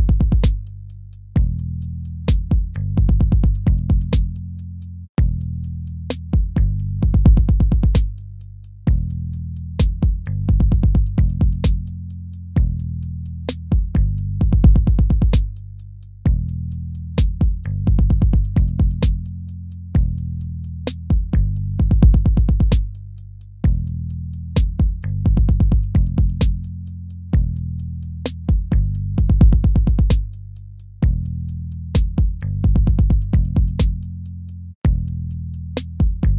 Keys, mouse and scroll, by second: 2.6 ctrl+-, 3.1 ctrl+-, 6.8 ctrl+v, 7.5 ctrl+v, 12.1 ctrl+v, 12.7 ctrl+v, 13.3 ctrl+v, 14.0 ctrl+v, 14.8 ctrl+v, 15.6 ctrl+-, 17.5 BackSpace, 21.6 ctrl+z, 28.0 ctrl+-, 29.3 right click, 33.8 ctrl++, 35.8 ctrl++, 36.1 ctrl++.